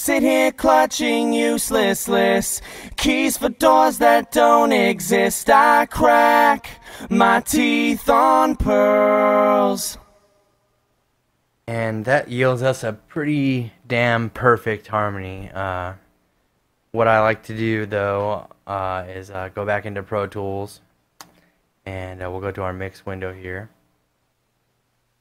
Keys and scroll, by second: 0.3 space, 10.5-11.3 typing, 19.3 super+Tab, 22.6 super+=.